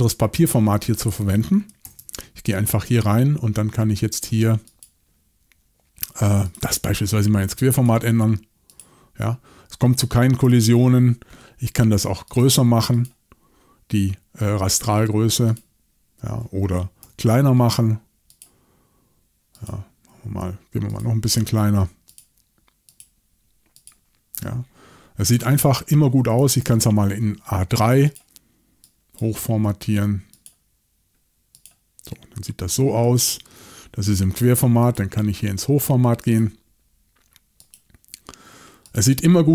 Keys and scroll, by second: 1.9 shift+super+l, 10.8 shift+super+l, 17.0 shift+super+l, 26.6 shift+super+l, 33.3 shift+super+l.